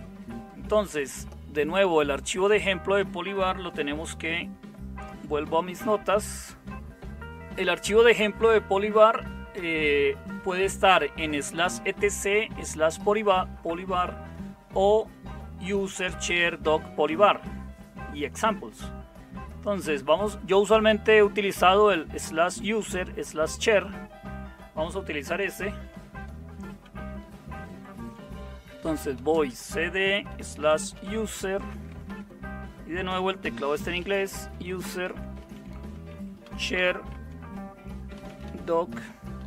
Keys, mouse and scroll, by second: 5.4 super+7, 27.7 super+0, 28.7-32.0 typing, 33.4-39.4 typing.